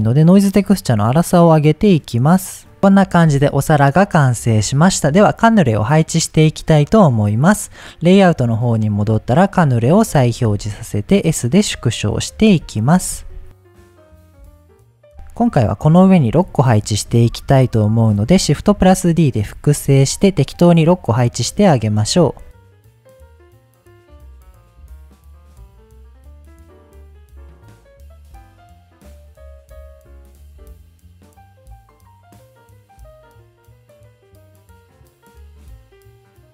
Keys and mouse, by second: 0.5-2.8 drag, 3.3 middle click, 7.4-9.4 drag, 10.5 s, 11.4 click, 12.5-15.1 typing, 13.8 click, 14.6 click, 14.9 click, 15.4 click, 16.3 KP_1, 17.1 g, 17.2 z, 18.1 click, 18.8 KP_7, 21.0 shift+d, 22.2 click, 22.4 r, 22.6 click, 22.9 g, 23.1 click, 23.7 shift+d, 24.1 click, 24.2 r, 24.5 click, 25.3-30.2 typing, 25.6 click, 26.1 click, 27.0 click, 28.2 click, 28.8 click, 29.4 click, 31.0 click, 31.3 middle click, 33.5 middle drag, 34.0-36.2 typing, 34.7 click, 35.0 drag, 35.6 drag, 36.3 click.